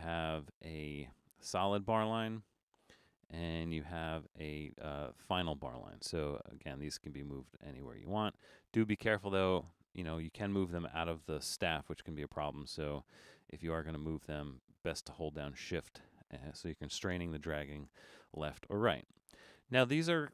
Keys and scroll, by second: 2.7 BackSpace, 12.7 super+z, 17.9 BackSpace.